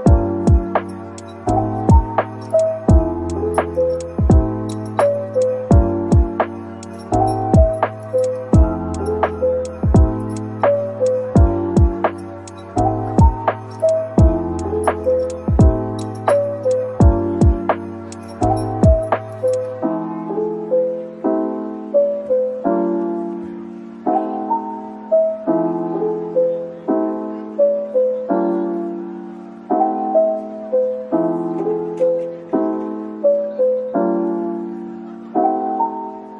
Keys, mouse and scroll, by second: 2.5 alt+click, 2.9 right click, 6.2-6.7 scroll down 1, 6.7 middle click, 8.0-9.9 typing, 11.6-12.5 typing, 15.5-15.9 scroll up 1, 15.9 middle click, 18.6 shift+click, 23.7 typing, 26.0 typing, 29.4 middle click, 33.6-34.0 scroll down 1, 34.1 middle click, 36.1 shift+double click.